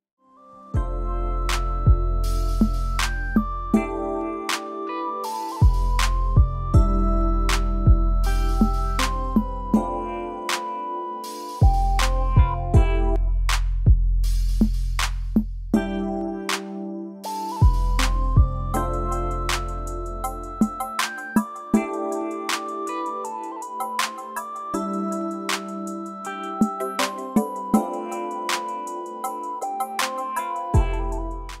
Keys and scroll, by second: 0.0 m, 7.2 super+], 8.1 v, 11.9 f, 12.3 f, 13.3-16.9 typing, 19.5 space, 20.0-20.4 space, 21.7 ⟲, 22.8 v.